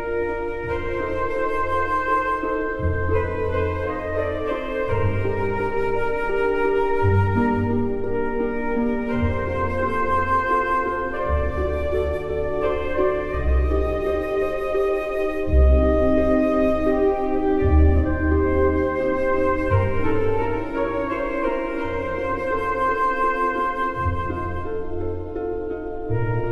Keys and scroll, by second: 13.9 ctrl+-, 17.7 Caps_Lock.